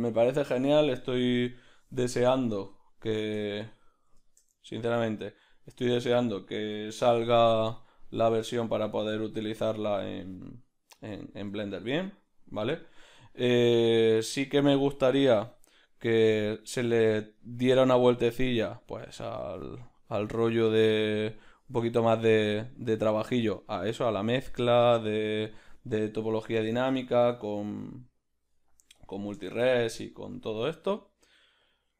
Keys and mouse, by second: 2.9 click, 3.6-7.8 ctrl+middle drag, 5.9 a, 7.8-9.1 drag, 9.1 z, 14.2-16.5 right drag, 16.5-17.5 drag, 17.5-21.1 middle drag, 21.1 click, 26.1-29.0 ctrl+middle drag, 29.0 click, 31.7 shift+a.